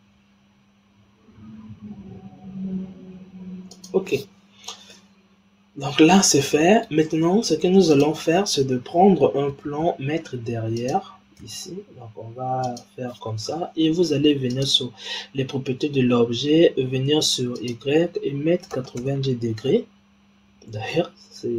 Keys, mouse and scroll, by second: 4.8-7.9 middle drag, 7.9 click, 9.5 shift+a, 11.3 s, 14.4 click, 17.5-20.5 drag, 20.8-21.5 middle drag.